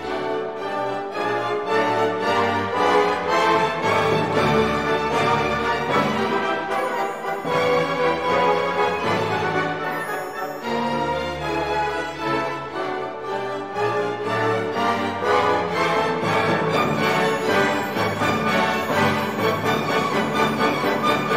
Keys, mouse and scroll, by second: 1.7 scroll down 2, 3.6 scroll up 2, 13.3-13.8 scroll down 4, 15.8 click, 18.2 click, 20.1 click.